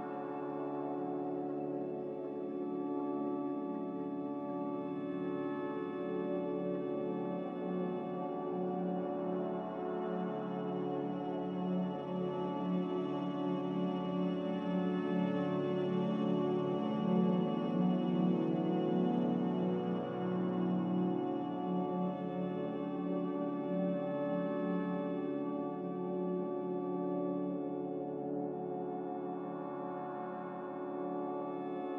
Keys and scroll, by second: 3.5 b, 5.7 typing, 6.4 Return, 9.3-10.1 typing, 12.1 ctrl+c, 12.1 a, 21.0 m, 27.6 n, 31.6 b.